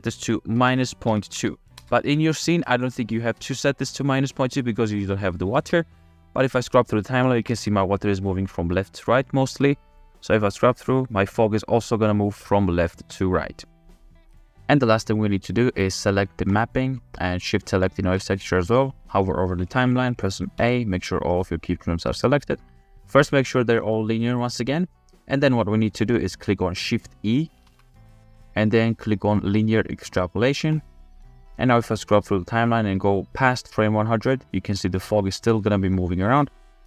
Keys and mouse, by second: 3.5 space, 6.7 space, 7.2 shift+drag, 9.6 space, 10.3-12.0 drag, 14.5-15.7 middle drag, 15.7 click, 16.5 click, 17.9 shift+click, 20.6 a, 21.7 click, 23.8 t, 25.7-26.5 drag, 27.7 shift+e, 33.8-34.7 drag.